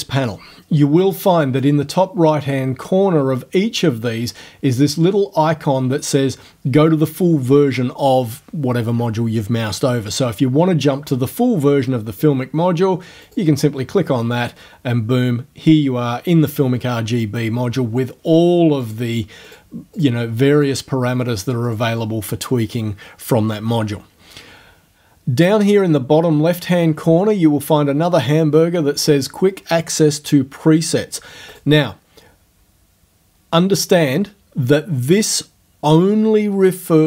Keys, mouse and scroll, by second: 13.3 click, 18.9 click, 19.5 click, 20.0 click, 20.6 click, 21.7 click, 31.6 click.